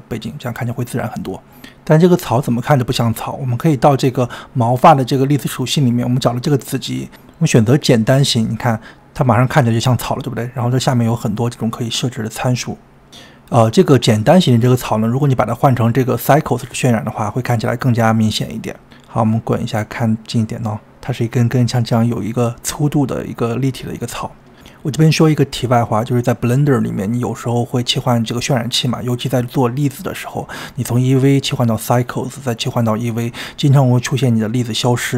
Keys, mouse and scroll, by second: 0.8-3.8 middle drag, 3.8 scroll up 4, 7.6-9.9 drag, 17.7-35.1 drag, 19.9-20.5 scroll up 5.